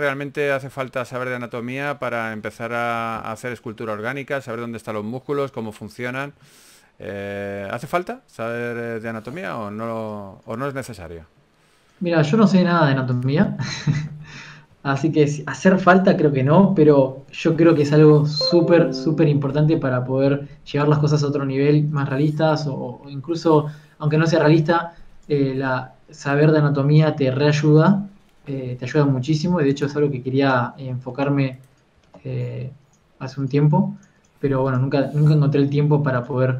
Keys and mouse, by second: 0.1 r, 0.9 g, 2.1 g, 2.7 s, 3.1 alt+r, 3.5 s, 4.4 r, 5.6 g, 6.0 r, 6.4 g, 6.8 a, 8.4 right click, 9.2 KP_1, 9.8 s, 11.0 click, 11.3 s, 12.5 click, 12.9 click, 14.7 a, 19.6 a, 21.4 a, 25.7 right click, 25.9 a, 27.3 KP_3, 29.1 s, 30.6 g, 31.4 alt+r, 31.6 s, 32.4 s, 33.8 r, 35.8 KP_1.